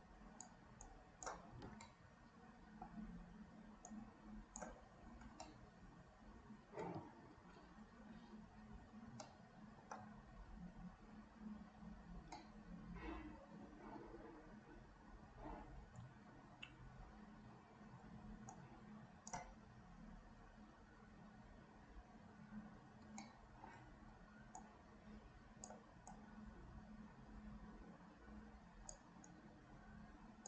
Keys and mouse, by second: 0.8 right click, 1.9-3.0 middle drag, 4.0 right click, 5.5-7.0 middle drag, 8.4 ctrl+s, 9.3 shift+click, 12.4-16.0 middle drag, 18.6 shift+click, 23.2 shift+middle click, 24.6-25.8 drag, 26.1-29.1 drag, 29.3-30.4 drag.